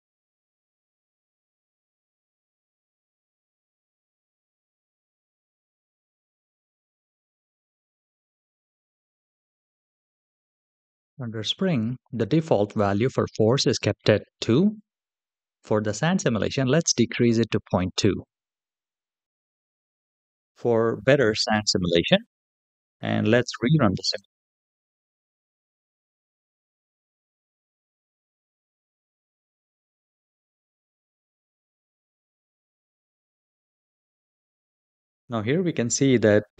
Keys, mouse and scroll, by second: 5.9 space, 8.7 click, 10.3 click, 16.3-20.1 drag, 23.9 click, 35.5-36.5 scroll up 2.